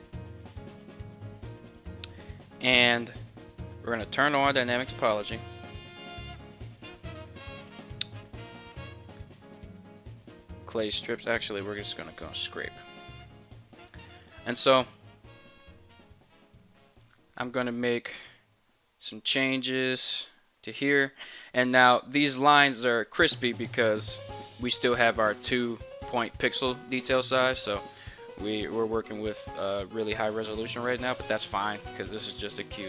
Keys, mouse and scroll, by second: 19.9-32.8 drag.